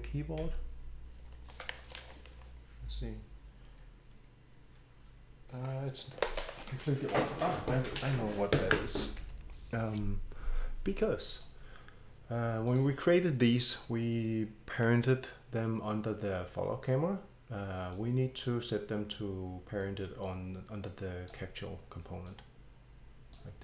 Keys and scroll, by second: 0.6 r, 9.2 Escape.